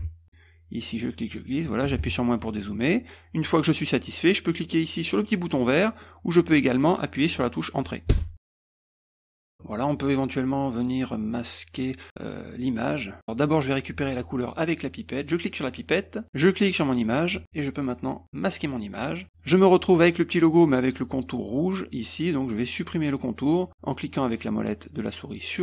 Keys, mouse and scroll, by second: 0.2 middle click, 0.9 click, 2.7 middle click, 6.1 middle click, 8.1 Return, 9.3 click, 15.7 click, 16.7 click, 18.5 click, 19.4 click.